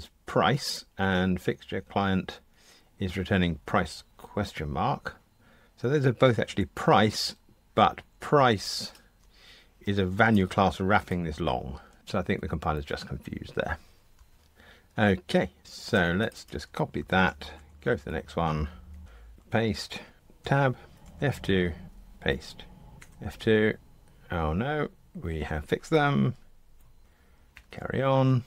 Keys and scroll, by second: 8.9 super+b, 14.1 super+[, 17.0 super+c, 17.5 F2, 19.0 F1, 21.0 F2, 21.8 F1, 22.2 super+v, 23.0 F2, 27.5 super+F9.